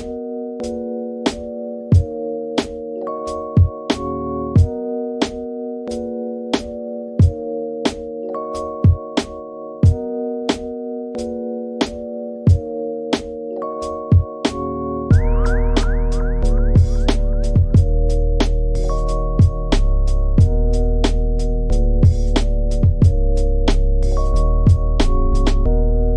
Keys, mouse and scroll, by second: 0.3-1.2 scroll down 4, 1.2 click, 1.4 click, 1.7 click, 1.9 click, 2.0 click, 3.2 click, 3.2 middle click, 3.8 Tab, 4.0 middle click, 4.3 Tab, 4.6 middle click, 5.4 scroll down 2, 5.5 middle click, 6.0 KP_3, 8.3 shift+d, 9.0 ctrl+z, 9.3 click, 9.5 click, 10.7 click, 11.0-12.6 drag, 13.1 click, 13.6 click, 15.0 g, 16.1 middle click, 16.4 Tab, 16.5-17.8 middle drag, 17.8 Tab, 18.1 scroll down 2, 18.2 middle click, 19.1 s, 21.1 middle click, 21.4-23.9 typing, 21.7-22.3 scroll up 2, 22.9 click, 23.7 middle click, 24.5 middle click, 24.9 click, 25.1 g, 25.2 middle click, 25.6 KP_3, 25.8 g.